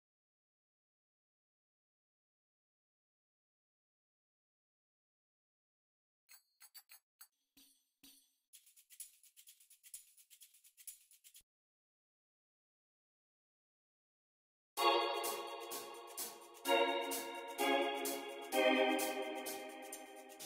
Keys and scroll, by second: 2.1 BackSpace, 2.6 BackSpace, 2.9 f, 4.6 l, 4.9 o, 11.3 super+r, 11.7 f, 12.7 alt+r, 14.4 alt+r, 14.6 space, 17.5 y.